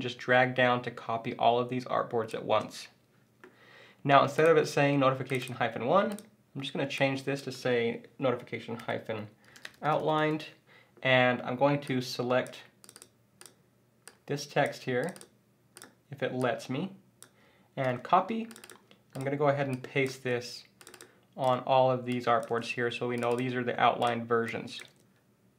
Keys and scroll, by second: 17.8 super+c, 20.1 super+v, 22.5 super+v, 24.9 super+v.